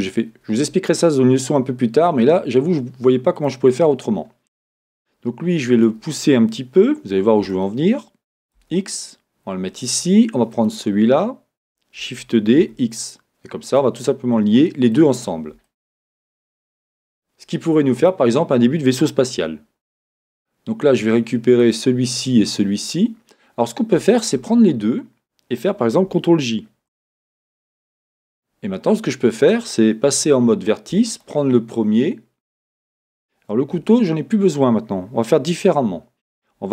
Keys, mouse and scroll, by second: 3.4 click, 9.7 g, 9.8 click, 10.5 click, 12.0 shift+d, 13.8 click, 14.6-16.7 shift+drag, 15.2-15.7 scroll, 16.5 scroll, 16.7-18.0 middle drag, 16.7-17.1 scroll down 1, 18.0 click, 21.6 click, 24.2 shift+click, 26.9 ctrl+j, 27.9 Tab, 31.1 click, 33.8 Escape, 33.8-36.7 drag.